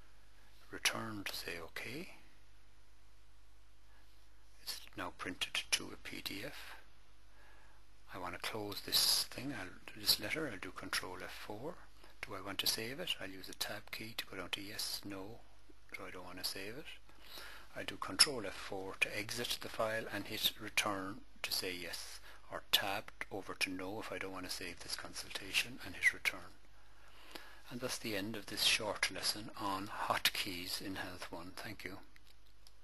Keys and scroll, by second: 1.1 Return, 10.5 ctrl+F4, 13.1 Tab, 15.5 Return, 18.3 ctrl+F4, 22.6 Tab, 26.3 Return.